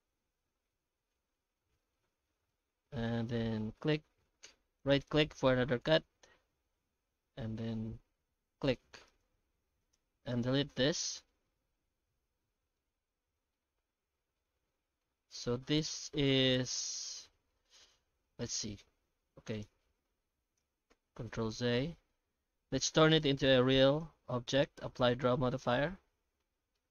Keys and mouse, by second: 9.8 right click, 9.8 2, 10.3 ctrl+right click, 10.6 ctrl+x, 11.3-12.7 middle drag, 13.3 1, 15.6 a, 17.8 Tab, 18.2 ctrl+shift+x, 20.9 ctrl+z, 22.0 alt+h, 22.5 alt+a, 22.8 right click, 23.3 ctrl+shift+x, 25.6 Tab, 26.2 alt+a, 26.8-26.9 middle drag.